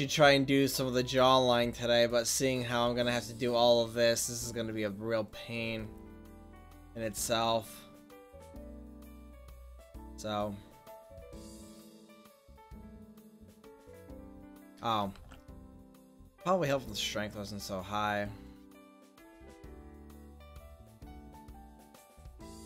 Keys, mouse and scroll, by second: 0.1 click, 1.4-2.6 drag, 2.6 middle click, 5.8-9.7 drag, 9.7-12.8 middle drag, 15.4 ctrl+z, 16.5-18.3 drag, 18.5-21.8 drag, 22.5-22.6 middle drag.